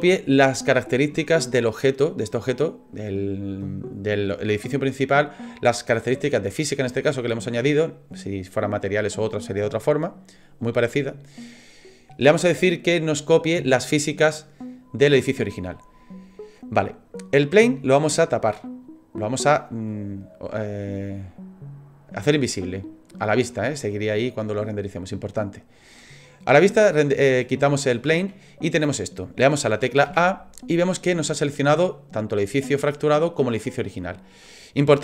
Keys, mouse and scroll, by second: 18.5 click.